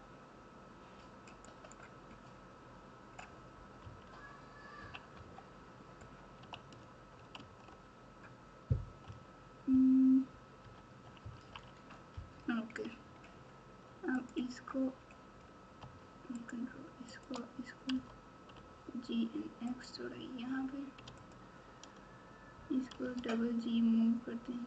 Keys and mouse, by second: 1.5 right click, 3.8 KP_3, 4.8 KP_1, 5.1 KP_9, 7.3 alt+z, 9.0 KP_3, 10.6 KP_4, 11.0 KP_6, 11.2 KP_6, 11.4 KP_6, 14.1 click, 16.4 shift+click, 17.1 shift+click, 17.9 g, 21.2 alt+click, 22.9 g.